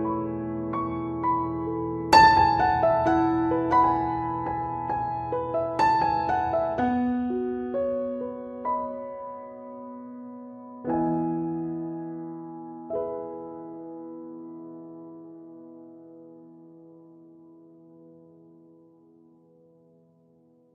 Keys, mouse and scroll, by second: 0.0 ctrl+middle click, 0.1 middle click, 1.1 click, 1.5 middle click, 2.3 click, 2.6 middle click, 3.8 middle click, 3.8 ctrl+middle click, 4.1 ctrl+middle click, 4.9 click, 5.1 shift+middle click, 5.5 ctrl+middle click, 6.1 click, 6.6 click, 6.6 f, 7.0 click, 7.7 click, 8.5 click, 8.6 click, 10.0 click, 10.0 middle click, 10.5 click, 10.7 click, 11.2 click, 11.5 click, 12.2 click, 12.2 f, 12.5-13.2 shift+click, 14.0 shift+click, 14.3 click, 14.4 click, 14.8 click, 14.9 shift+click, 15.5 click, 15.7 ctrl+click, 16.0 ctrl+click, 16.6 ctrl+click.